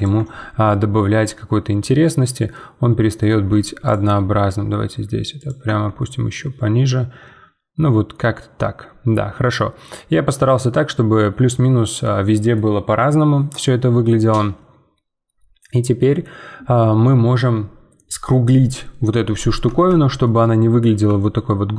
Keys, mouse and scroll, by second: 0.1 Tab, 1.0-3.3 middle drag, 3.3 Tab, 3.8 click, 4.1 g, 5.6 Tab, 6.0-9.0 middle drag, 13.6-16.8 middle drag, 19.5-19.9 scroll up 2, 19.9-21.5 shift+middle drag, 21.5 scroll up 3.